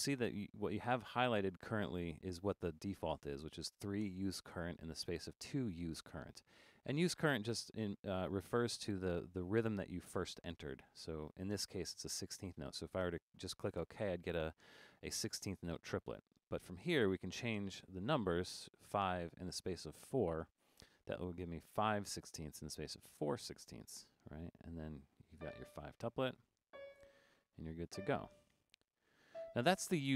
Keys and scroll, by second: 17.7 5, 20.5 4.